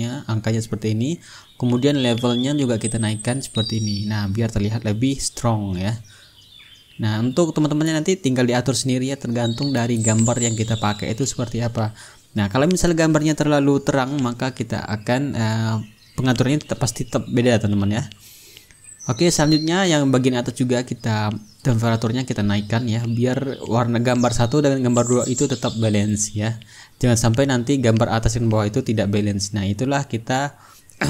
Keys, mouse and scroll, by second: 0.9 click, 2.0 click, 3.4-6.2 drag, 8.8-12.7 drag, 14.3-18.2 drag, 17.2-18.1 ctrl+scroll up 1, 18.5-20.0 ctrl+middle drag, 19.6-20.0 ctrl+scroll down 1, 20.0 click, 20.7 click, 21.8-23.4 drag, 23.6-28.2 drag, 29.0-30.6 drag, 30.9-31.0 drag.